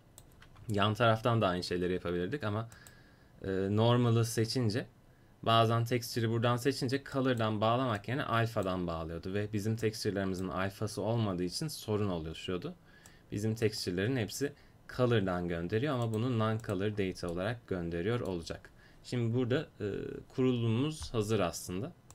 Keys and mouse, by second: 2.8-11.9 drag, 13.1-21.4 drag.